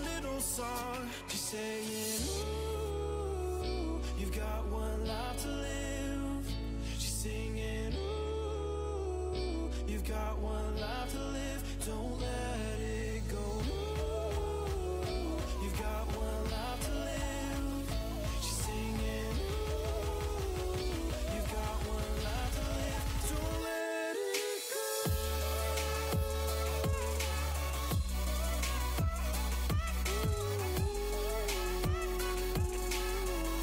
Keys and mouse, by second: 1.0-2.7 middle drag, 8.7-12.3 middle drag, 9.5-12.0 drag, 15.1-17.2 middle drag, 17.2 click, 17.8-22.4 middle drag, 23.6-32.3 drag, 32.6 middle click.